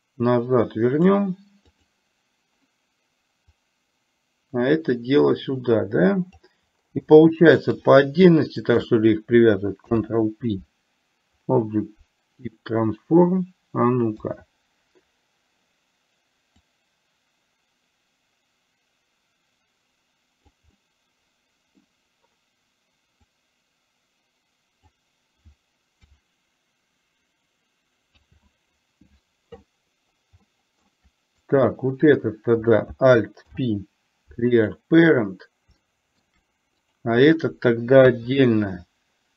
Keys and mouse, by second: 1.7 click, 3.7-6.6 drag, 7.2-7.7 shift+middle drag, 8.8 shift+click, 16.8-20.7 drag, 20.8-21.8 middle drag, 23.6-25.1 drag, 28.3 ctrl+z, 30.6 shift+middle drag, 31.6 click, 33.6 alt+p, 35.9-36.3 shift+middle drag, 37.1 drag.